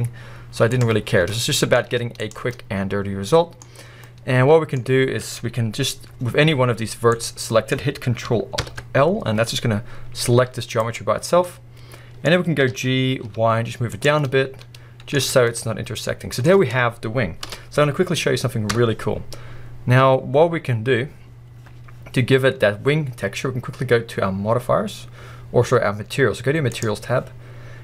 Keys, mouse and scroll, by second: 0.8 click, 1.1 scroll, 1.3 middle click, 1.9 z, 2.5 middle click, 3.7 scroll, 4.1 middle click, 6.8 scroll, 7.1 click, 7.5-8.6 middle drag, 10.2 g, 10.9 right click, 11.5 middle click, 12.4-12.7 scroll, 12.7 g, 14.1 click, 14.2 middle click, 15.2 alt+a, 15.5 middle click, 17.5 KP_1, 18.7 Tab, 19.1-19.7 scroll down 1, 19.7-21.0 scroll up 1, 21.0-21.8 scroll down 1, 22.5 scroll up 1, 26.7 click.